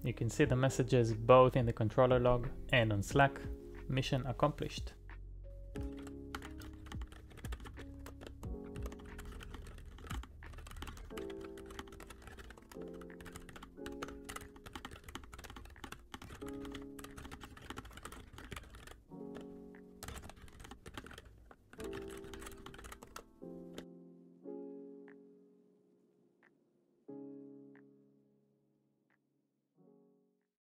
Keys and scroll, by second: 4.8 typing, 12.4-15.4 typing, 17.8 typing.